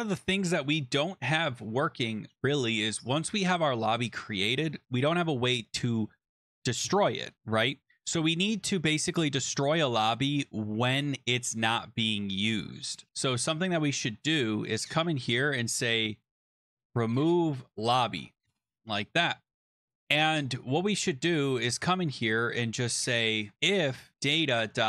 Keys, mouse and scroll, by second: 0.5-2.0 scroll, 2.0 click, 6.4 click, 13.5 click, 14.9 Return, 15.8-20.5 typing, 17.3 shift+click, 20.6-21.2 scroll, 22.1 click, 22.5 click, 22.8 click, 23.1 Return, 23.4-24.8 typing.